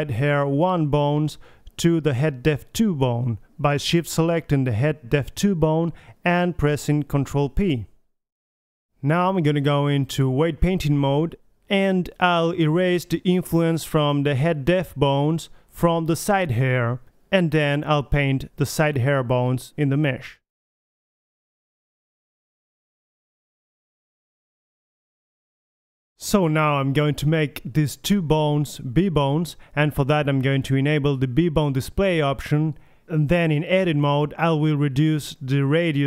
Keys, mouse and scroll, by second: 0.7-4.4 drag, 1.0 h, 1.8 a, 2.1 h, 6.4-7.5 right drag, 7.5 ctrl+p, 10.8 alt+h, 11.1 click, 11.1 a, 12.1 click, 12.5 right click, 12.7 middle click, 13.0 KP_3, 14.2 Tab, 14.6 middle click, 14.8 click, 15.3 click, 15.5-16.0 middle drag, 16.0 click, 16.9 middle click, 17.3 click, 17.7 middle drag, 18.2 drag, 18.2 middle drag, 18.7-19.4 middle drag, 19.2 click, 19.6 middle drag, 20.0-20.6 middle drag, 21.1 click, 21.3-21.7 middle drag, 22.0-22.8 drag, 24.1 click, 24.4-25.4 drag, 25.0 right click, 25.4 KP_3, 26.1 r, 28.2 r, 29.2 middle click, 30.6-31.0 middle drag, 32.4-32.8 drag, 35.1 Tab, 35.5 click.